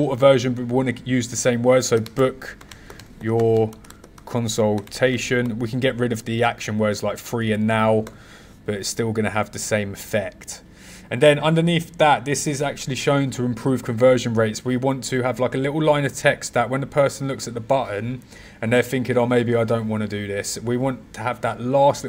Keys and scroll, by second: 1.9 b, 3.7 c.